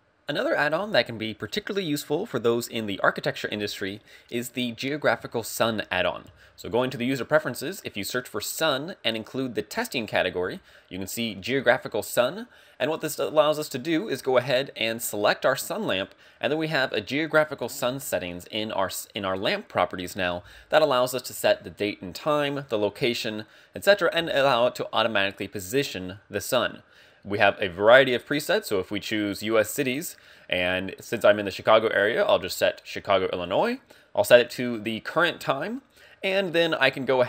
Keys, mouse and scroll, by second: 6.2 ctrl+alt+u, 16.3 click, 16.4 right click, 27.6 click, 34.4 click.